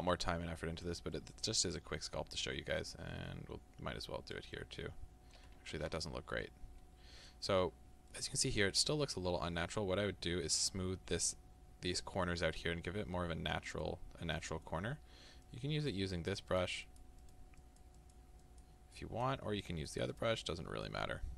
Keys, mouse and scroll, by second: 1.2-2.8 middle drag, 2.8-4.6 drag, 4.6-15.5 middle drag, 5.9 ctrl+z, 13.1-13.6 scroll up 2, 15.5-20.5 drag, 20.5-21.3 middle drag.